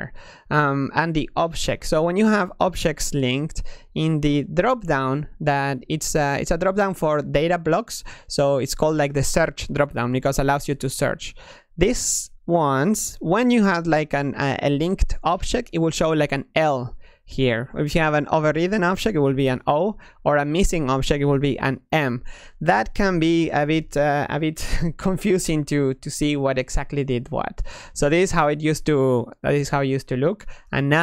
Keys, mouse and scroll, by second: 1.2-1.7 middle drag, 1.7 click, 4.4 click, 6.3 click.